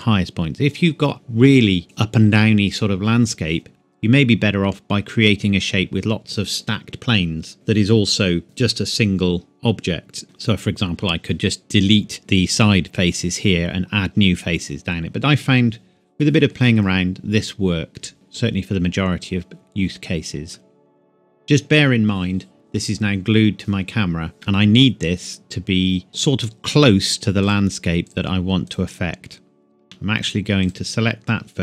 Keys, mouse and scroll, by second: 18.1 middle click, 24.4 middle click, 27.4 click, 29.8 Tab, 30.6 click.